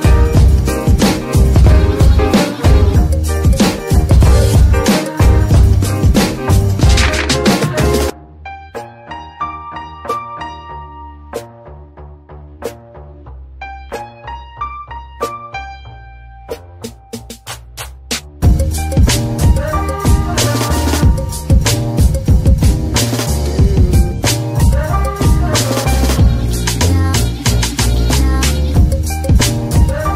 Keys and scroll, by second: 11.9 KP_3, 12.7 z, 17.2 z, 24.9 z, 27.4 z.